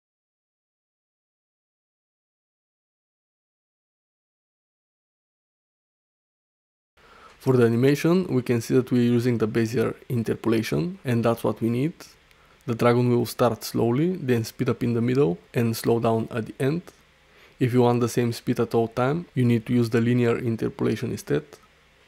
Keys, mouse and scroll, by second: 2.2-3.3 drag, 3.9 ctrl+middle drag, 4.3-4.9 alt+shift+middle drag, 6.3-7.0 drag, 13.9 d, 14.2-15.4 drag, 14.2 e, 15.4 d, 17.0-20.9 typing, 17.2 click, 18.5 click, 20.3 click, 21.9 ctrl+alt+middle drag.